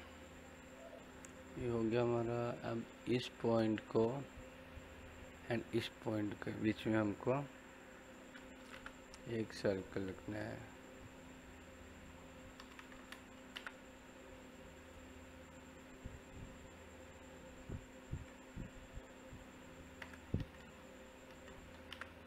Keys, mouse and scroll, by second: 0.2-3.6 middle drag, 8.5 l, 8.7 space, 9.9 click, 9.9 typing, 12.3 click, 13.3 l, 13.5 space, 14.7 click, 17.2 typing, 21.7 l, 21.9 space.